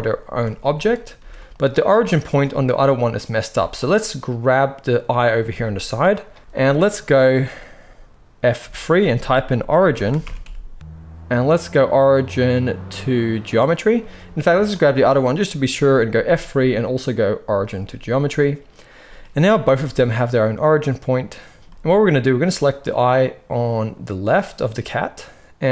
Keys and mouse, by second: 1.1 g, 1.9 z, 2.2 click, 2.8-14.5 middle drag, 3.4 z, 5.4 g, 8.5 F3, 14.5 click, 14.6-25.7 middle drag, 16.2 F3, 19.6 r, 21.5 alt+a.